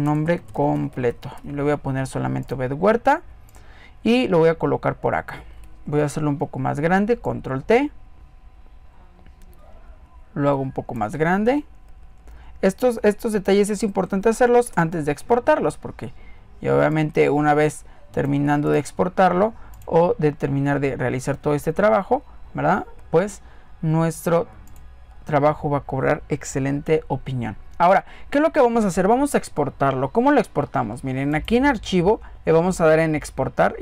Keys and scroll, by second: 5.8 ctrl+t, 11.5 alt+Down, 12.8 Up, 13.8 Right, 14.4 Return.